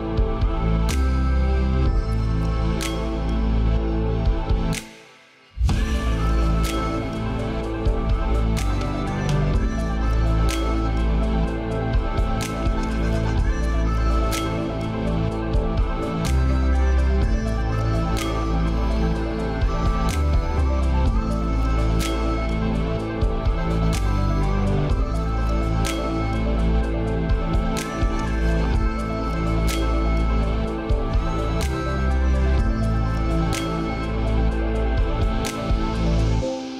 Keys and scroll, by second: 30.1 ctrl+space.